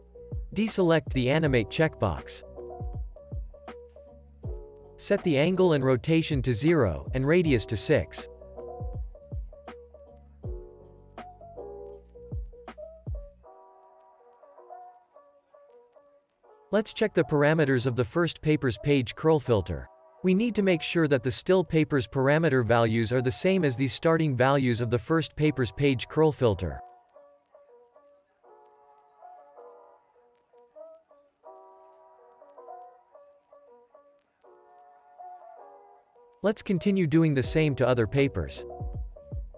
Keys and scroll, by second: 3.3 0, 3.4 Return, 5.1-8.2 typing, 5.2 Return, 8.7 Return, 26.8-27.7 typing.